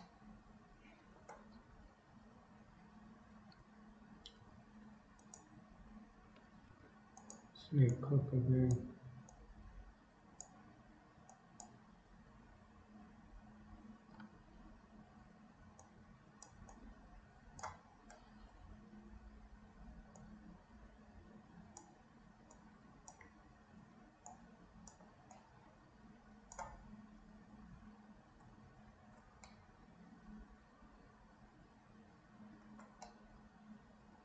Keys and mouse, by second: 0.0-1.4 middle drag, 1.6 KP_3, 3.5 k, 4.6 f, 6.6 f, 8.0 click, 9.3-10.6 drag, 11.4 click, 14.2 KP_1, 15.9-17.7 drag, 20.2-21.9 drag, 22.6 click, 24.3 click, 25.5-26.6 drag, 29.5-32.5 middle drag, 33.2-34.2 shift+middle drag.